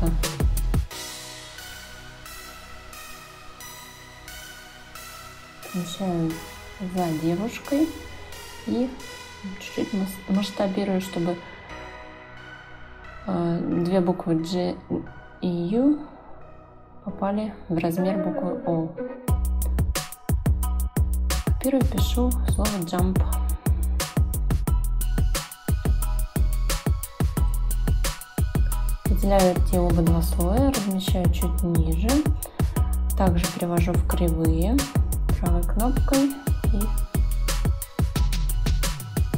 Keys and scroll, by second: 10.2 ctrl+z, 12.9 ctrl+z, 21.9 t, 23.3-24.3 typing, 24.7 Escape, 26.6 Escape.